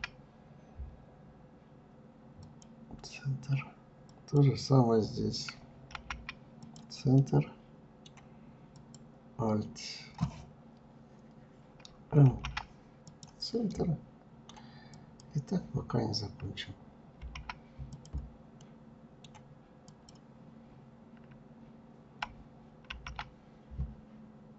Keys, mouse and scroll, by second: 3.1 click, 6.2-7.8 middle drag, 7.8-10.8 drag, 11.3 alt+m, 12.7-14.0 middle drag, 14.0-16.2 drag, 16.2 alt+m, 17.6-18.9 middle drag, 18.9-21.9 drag, 22.9 alt+m.